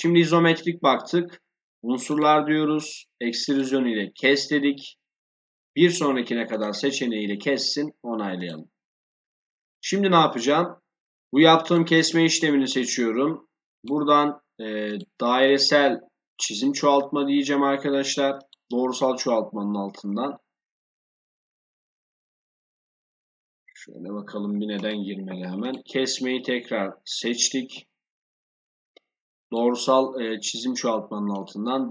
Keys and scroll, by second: 23.8 Escape.